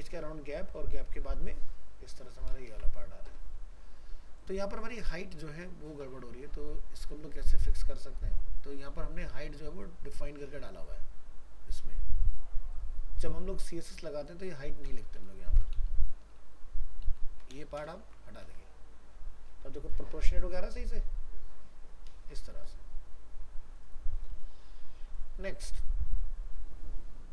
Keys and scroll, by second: 2.7 ctrl+0, 15.7 ctrl+shift+Left, 18.0 ctrl+s, 18.5 alt+Tab, 22.1 ctrl+0.